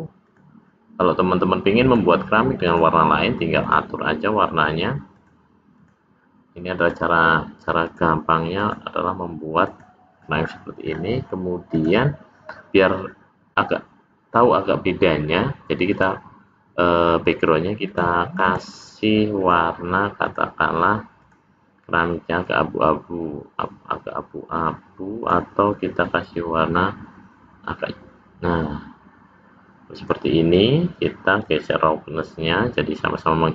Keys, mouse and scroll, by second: 0.3 click, 1.9 click, 3.6 click, 5.2 click, 6.9 click, 8.6 click, 10.5-11.6 scroll down 4, 11.8 click, 15.9 click, 17.9 click, 18.5 click, 19.5 click, 20.3 click, 21.3 click, 31.5 click.